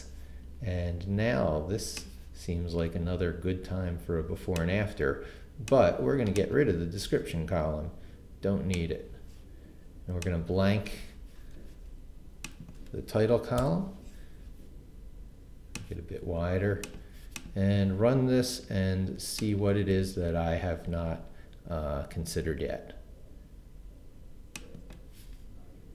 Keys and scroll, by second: 13.8 BackSpace.